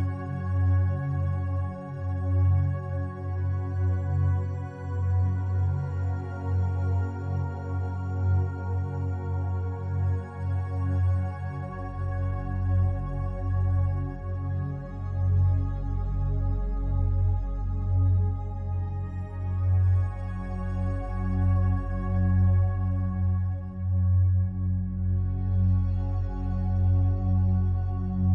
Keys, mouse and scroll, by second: 13.5 click, 14.9-16.8 alt+drag, 16.8 shift+a, 19.2 click, 21.9 Tab, 27.1 right click.